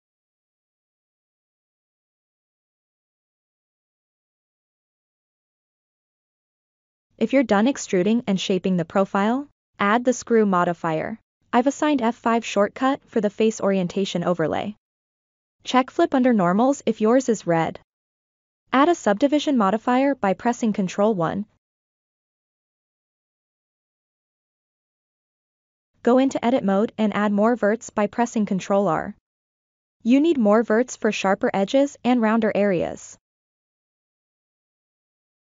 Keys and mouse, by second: 0.8 e, 4.2 Tab, 9.1 click, 11.8 F5, 14.3 click, 15.1 click, 16.2 F5, 19.0 ctrl+1, 20.2-20.8 shift+middle drag, 24.4 Tab, 29.4 ctrl+r, 31.1-32.8 drag, 33.2 ctrl+r, 34.2-35.5 drag.